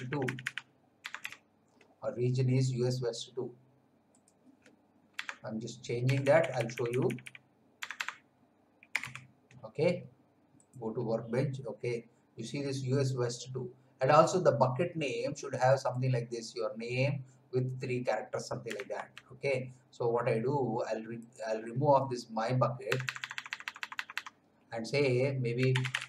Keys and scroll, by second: 0.9 BackSpace, 1.1 2, 5.1 BackSpace, 6.0 2, 6.2 Left, 7.7-9.5 typing, 18.9 alt+Tab, 22.8 BackSpace, 25.3-26.0 typing.